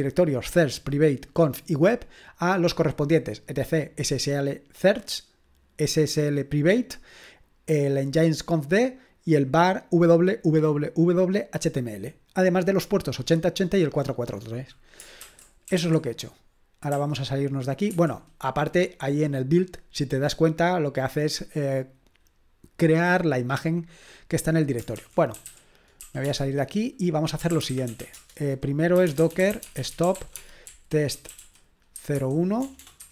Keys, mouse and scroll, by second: 15.0-16.9 typing, 17.9 Escape, 24.7-33.1 typing.